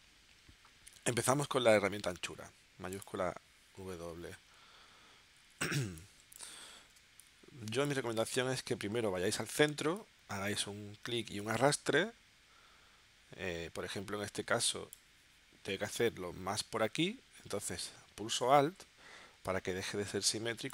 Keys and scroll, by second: 5.8 space, 6.9 space.